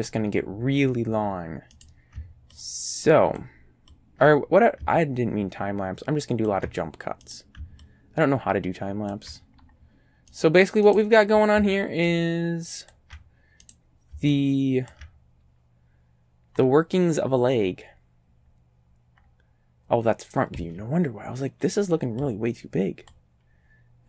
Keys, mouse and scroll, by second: 1.8 right click, 2.6 ctrl+click, 4.0-6.7 ctrl+drag, 7.3 right click, 7.9-9.3 ctrl+drag, 9.5-9.9 ctrl+scroll up 2, 10.3 right click, 10.9 right click, 12.2 ctrl+click, 13.7 right click, 14.4 ctrl+click, 16.6 scroll up 2, 17.5 scroll down 1, 20.6 a, 21.8 b, 22.3-23.3 drag.